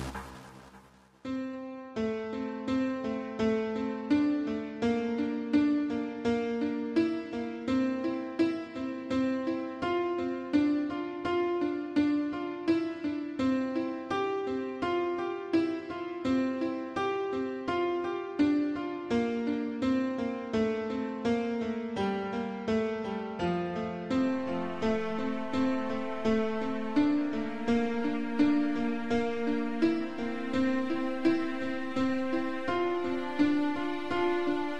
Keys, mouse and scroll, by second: 1.6 Escape, 2.0 middle click, 2.6 typing, 4.3 click, 4.4 click, 4.6 middle click, 5.4 r, 6.9 click, 7.1 click, 7.2 middle click, 8.2 middle click, 8.7 middle click, 10.0 7, 10.7 r, 11.5 click, 11.6 click, 11.9 middle click, 12.4 middle click, 12.6 scroll down 2, 14.6 middle click, 15.4 shift+middle click, 15.7 middle click, 16.3 Right, 17.0 shift+middle click, 18.4 click, 18.6 click, 19.6 7, 20.0 shift+middle click, 21.1 g, 23.5 Escape, 24.1 shift+middle click, 26.6 shift+click, 27.2 shift+click, 27.6 middle click, 29.0 shift+click, 32.3 scroll down 2, 32.7 middle click.